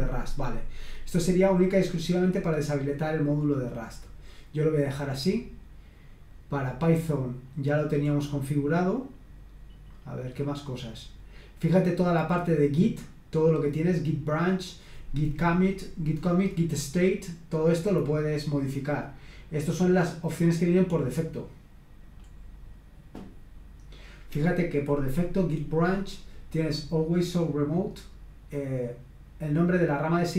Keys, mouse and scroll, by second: 0.1-1.9 scroll down 1, 1.9-3.5 scroll down 1, 3.5-4.6 scroll down 1, 5.1-5.7 scroll up 1, 8.0-8.4 scroll up 1, 9.1-9.9 scroll up 1, 9.9-10.3 scroll up 1, 10.7-11.0 scroll up 1, 14.3 click, 19.3-20.1 scroll down 1, 22.1-23.2 scroll up 1, 23.4-25.6 scroll up 1.